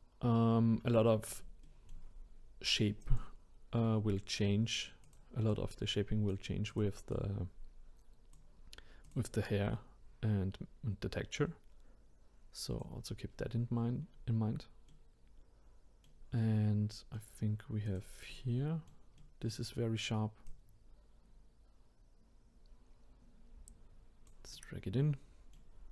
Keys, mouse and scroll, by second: 0.5-1.6 scroll down 1, 1.6-3.0 shift+middle drag, 3.0 click, 4.1-5.0 scroll up 2, 5.0 click, 5.5 click, 6.7 click, 7.1-12.7 drag, 14.1-14.9 scroll down 2, 14.9-17.8 middle drag, 17.8 click, 18.3-20.5 middle drag, 20.5 click, 24.5-25.9 middle drag.